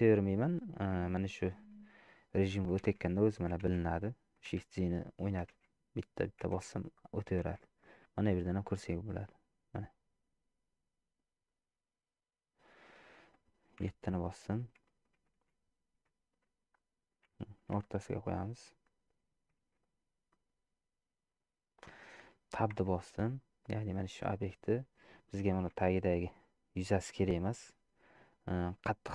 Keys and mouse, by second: 1.3 middle click, 3.1 shift+z, 9.1 click, 11.0 click, 11.7 click, 13.0 middle click, 13.8 KP_7, 15.0 shift+middle click, 15.6 shift+z, 17.9 g, 19.9 shift+z, 20.4 middle click, 22.1 shift+middle click, 22.9 Tab, 23.4 middle click, 24.2 shift+middle click, 24.7 middle click, 25.9 3, 26.3 click.